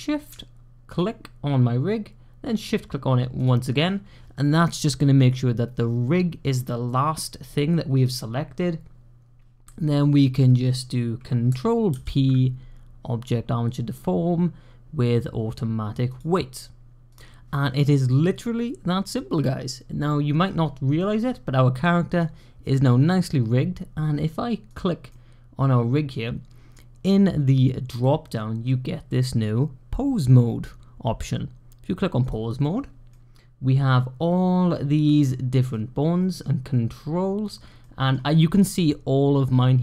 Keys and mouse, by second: 3.3-3.8 shift+drag, 11.8 ctrl+p, 17.0 click, 20.8-22.0 middle drag, 24.9-26.0 drag, 27.8-32.2 drag, 33.0-35.0 drag, 35.6-36.3 middle drag, 37.7 middle drag.